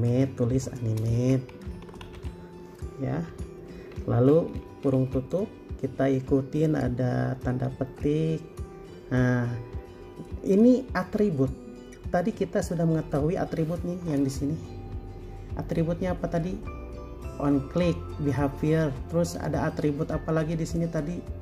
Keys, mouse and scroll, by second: 0.1 a, 1.2-3.5 typing, 5.1 typing, 7.9 typing.